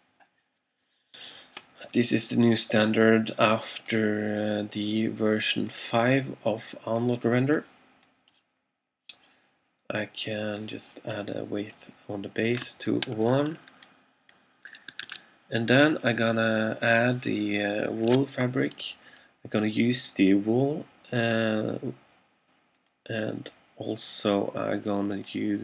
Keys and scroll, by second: 15.1 super+Tab.